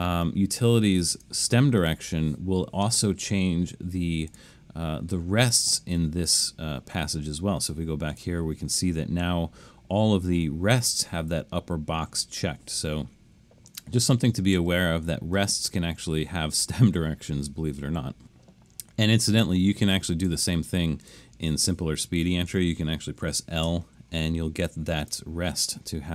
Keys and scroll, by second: 14.5 super+z, 22.2 Left, 22.5 Left, 23.7 l.